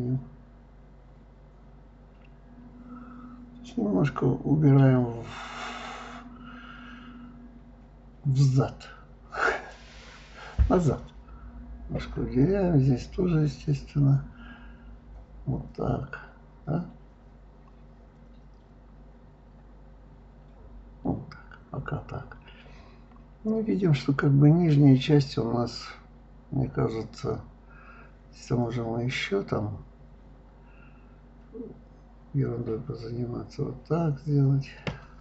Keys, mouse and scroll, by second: 2.4 g, 3.7-5.0 middle drag, 5.0 click, 5.7 click, 6.0 click, 6.3 right click, 6.8-8.3 middle drag, 8.3 g, 9.8 middle click, 10.7 click, 11.1 click, 11.2 click, 11.6-13.1 middle drag, 13.4 g, 15.2 click, 15.9 g, 17.4 click, 17.5 click, 17.7 g, 18.4 click, 18.5 click, 18.9 g, 20.4 click, 21.0 click, 21.2-22.8 middle drag, 24.4 click, 24.6 click, 25.2 click, 25.5 shift+click, 25.9 right click, 26.9 click, 27.7 click, 28.1 click, 28.4 shift+click, 28.8-30.2 middle drag, 30.2 g, 32.8 click, 33.0-34.5 middle drag.